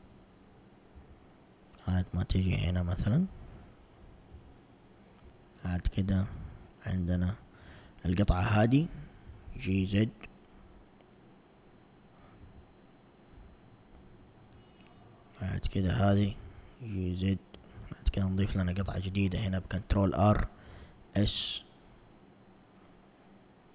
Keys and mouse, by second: 1.0 s, 4.4 z, 5.5 alt+click, 7.1 alt+click, 9.3 g, 12.5 s, 14.9 alt+click, 16.1 g, 18.7 ctrl+r, 20.8 s.